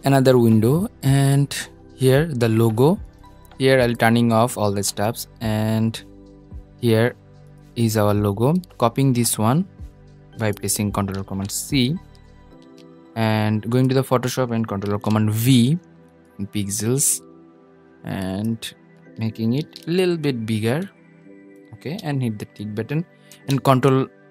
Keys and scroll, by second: 11.7 super+c, 14.0 super+v, 18.6 super+t, 22.3 super+s.